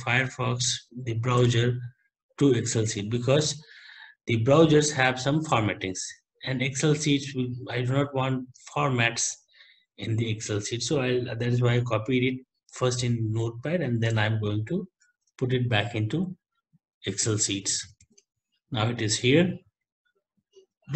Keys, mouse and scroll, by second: 1.4 alt+Tab, 10.9 ctrl+c, 14.2 alt+Tab, 15.1 alt+Tab, 18.1 ctrl+v.